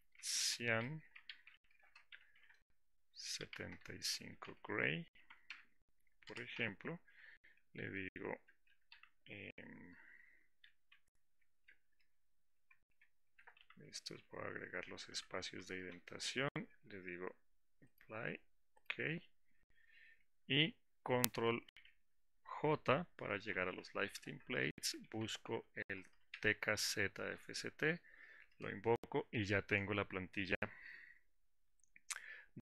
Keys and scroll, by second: 23.5 ctrl+j, 27.6 Return.